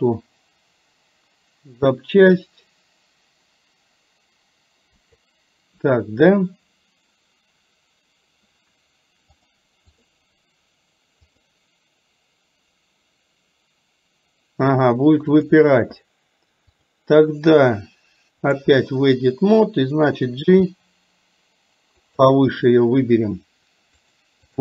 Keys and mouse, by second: 9.5 click, 11.3 click, 15.4 click, 16.8-18.8 drag, 20.5 g, 24.3 click.